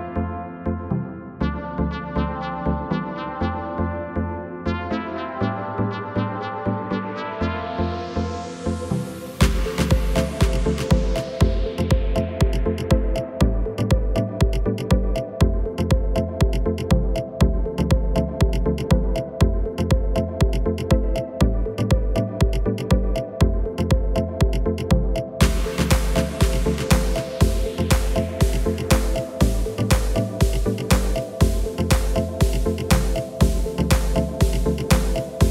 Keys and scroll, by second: 2.4 d, 8.5 d, 10.5 d, 12.6 d, 14.4 typing.